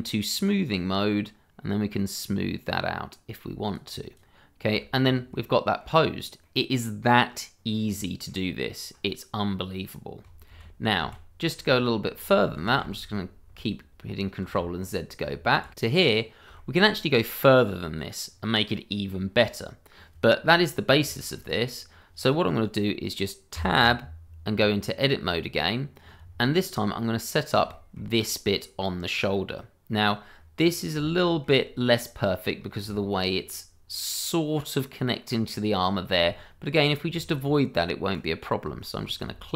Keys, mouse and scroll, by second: 0.4 shift+click, 0.7 click, 4.6-5.3 shift+scroll down 2, 5.3 middle click, 6.0 scroll down 1, 6.4 middle click, 7.6 scroll down 1, 7.9 middle click, 10.2 click, 10.5 ctrl+z, 13.3 ctrl+z, 15.7 ctrl+shift+z, 16.1 scroll up 1, 16.5 shift+middle click, 17.0 middle click, 18.3 scroll down 1, 18.7 middle click, 19.2-20.0 scroll up 1, 21.1 shift+middle click, 21.4 scroll up 1, 24.0 Tab, 25.3-26.3 scroll up 1, 26.9 middle click, 27.9 shift+middle click, 28.7-29.1 scroll down 1, 29.1 scroll up 1, 29.6 middle click, 30.4 scroll down 1, 30.7 middle click, 31.0 shift+middle click, 31.1 middle click, 31.2 shift+middle click, 31.8 middle click, 32.6 scroll up 1, 32.9 shift+middle click, 33.1-33.5 shift+scroll up 2, 33.5 middle click, 35.5-35.9 scroll down 1, 35.9 middle click, 36.3 shift+middle click, 36.4 middle click, 36.5 shift+middle click, 37.2 middle click, 37.3 shift+middle click, 38.1 click, 38.8 shift+middle click.